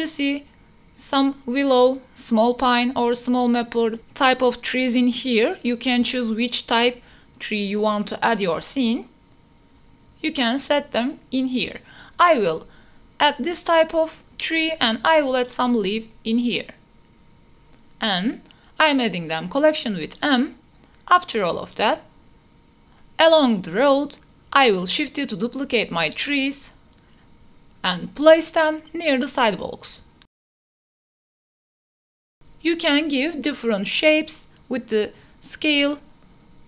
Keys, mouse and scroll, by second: 5.0 click, 5.7-6.0 middle drag, 6.8 middle click, 9.6-11.2 drag, 14.1 click, 15.7-17.1 drag, 18.9 middle click, 19.4 click, 19.5 middle click, 20.1-23.8 typing, 20.7 Return, 25.3 KP_0, 26.2 s, 28.1 shift+d, 29.0 y, 31.1-36.6 typing, 35.8 right click.